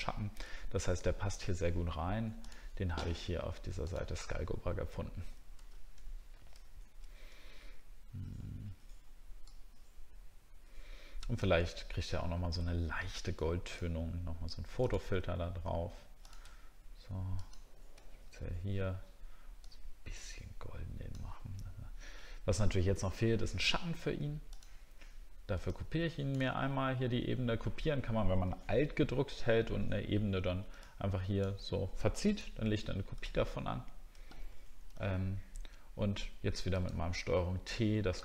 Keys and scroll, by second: 0.0-0.4 alt+scroll down 1, 5.6 alt+Tab, 6.6-7.6 alt+scroll down 1, 33.4 alt+scroll up 1.